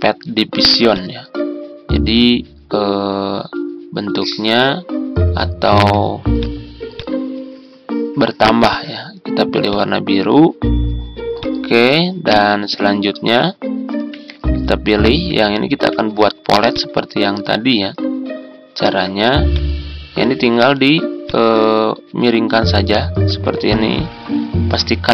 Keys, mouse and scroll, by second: 24.0 Down, 24.1 Down, 25.0 Up.